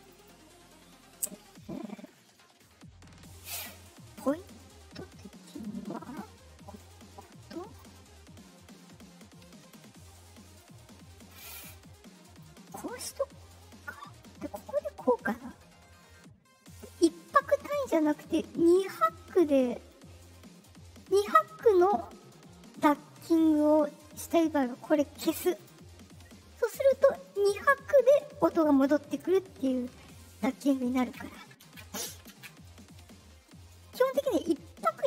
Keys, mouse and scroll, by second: 0.1 click, 3.3 right click, 4.3 right click, 5.4 right click, 6.0 right click, 6.7-7.7 drag, 9.5 right click, 10.4 right click, 11.1 right click, 11.5 click, 14.1-16.7 drag, 24.7 right click, 25.5 click, 26.7 click, 29.8 click, 31.0 ctrl+z.